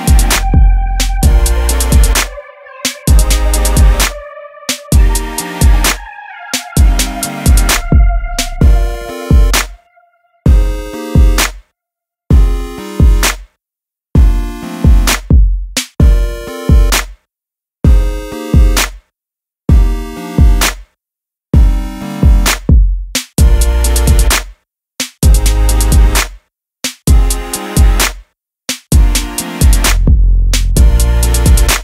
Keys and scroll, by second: 11.0-11.3 typing, 19.6 e, 22.5-23.0 typing, 31.6 [, 31.7 [.